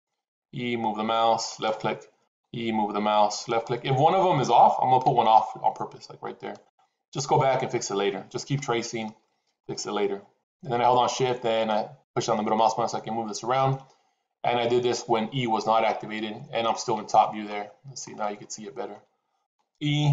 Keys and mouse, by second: 0.2 e, 2.2 e, 4.9 e, 8.5 shift+middle click, 11.6-13.6 shift+middle drag, 17.1 shift+middle click, 19.3 e.